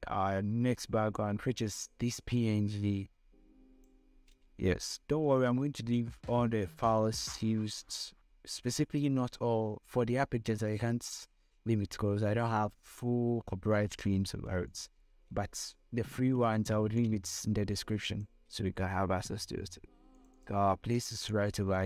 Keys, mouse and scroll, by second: 7.5-9.4 scroll up 2, 14.8-21.8 drag.